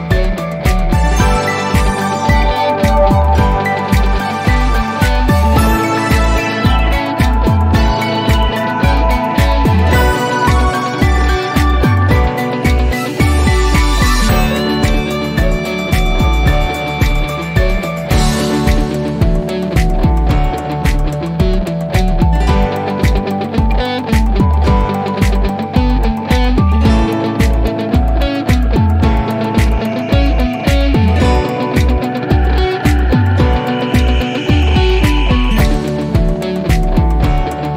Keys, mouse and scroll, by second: 2.5 click, 7.8 click, 10.7 click, 14.1 click, 19.4 click, 22.6 F3, 23.6-29.2 ctrl+drag, 31.2 F3.